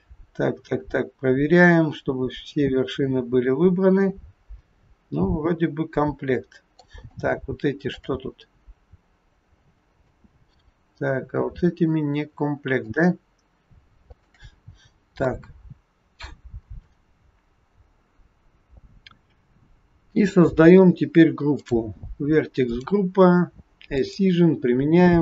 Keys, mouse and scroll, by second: 7.2 shift+middle click, 8.3-8.9 scroll up 4, 9.3-10.1 scroll up 1, 10.1 middle click, 10.1 scroll up 1, 12.7 shift+click, 14.0 shift+click, 17.2-18.4 scroll down 4, 18.4-19.1 scroll down 3, 21.6 click, 22.6 click, 23.9 click.